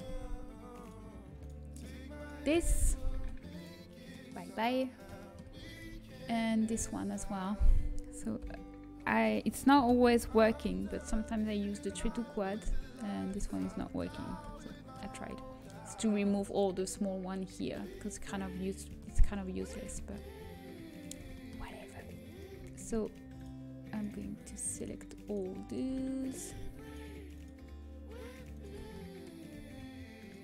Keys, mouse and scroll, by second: 3.1 Delete, 4.0-5.3 middle drag, 5.3 click, 5.7 a, 8.9 l, 9.7 space, 13.2-17.5 middle drag, 14.0 ctrl+z, 18.9-19.9 middle drag, 19.9 a, 20.0-21.1 middle drag, 22.4-25.9 right drag, 25.9-29.1 middle drag.